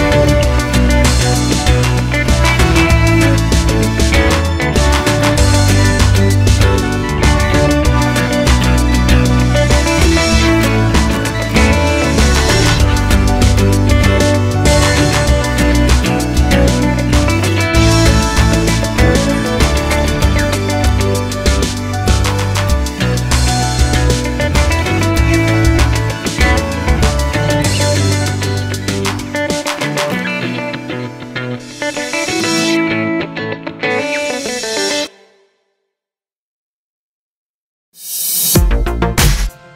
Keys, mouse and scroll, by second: 2.3 click, 7.0-9.6 drag, 9.6-10.6 middle drag, 10.6 KP_1, 11.6 scroll up 1, 13.0 click, 13.5 Tab, 22.0 Tab, 22.6 scroll down 1, 23.3-25.5 middle drag, 25.5-27.1 drag, 27.1-28.6 middle drag, 28.6 click, 36.1-38.5 drag.